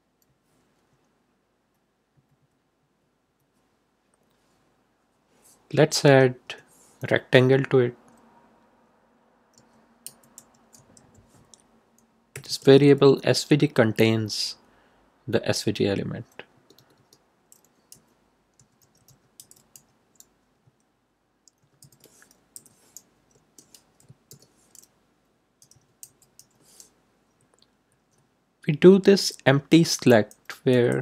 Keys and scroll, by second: 5.9 Return, 9.5 s, 10.0 v, 10.3 g, 10.7 space, 12.3 =, 12.4 space, 16.5 BackSpace, 17.9-20.2 typing, 21.3-22.3 typing, 22.5 Left, 24.2 shift+", 25.3-26.8 typing, 27.2 Right, 30.4 Left.